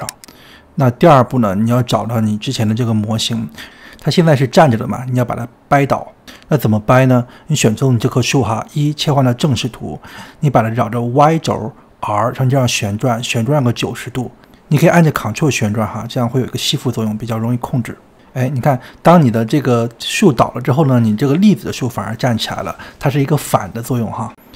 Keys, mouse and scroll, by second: 0.0-2.3 drag, 2.3-3.5 scroll down 5, 3.5-4.5 shift+middle drag, 4.5-5.3 scroll down 3, 5.3-6.3 scroll down 6, 6.3 click, 6.6-10.0 shift+middle drag, 10.0 KP_1, 11.4 r, 19.8-20.9 scroll up 10, 20.9 middle click, 21.8-22.2 scroll down 2, 22.2-24.0 middle drag, 24.0 click.